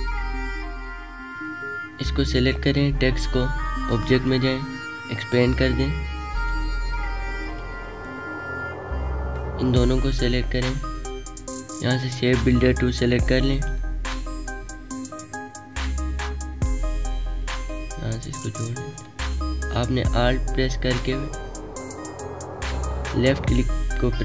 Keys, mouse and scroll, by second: 0.1 click, 7.9-11.4 drag.